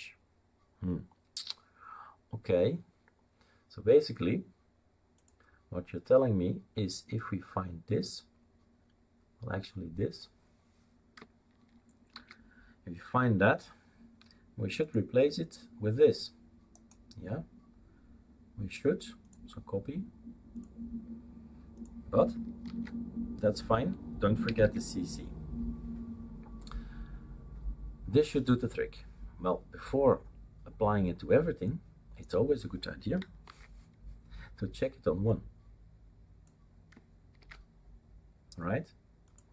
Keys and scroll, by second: 12.1 ctrl+f, 22.6 ctrl+v, 24.4 typing, 33.4 ctrl+c, 37.4 ctrl+v.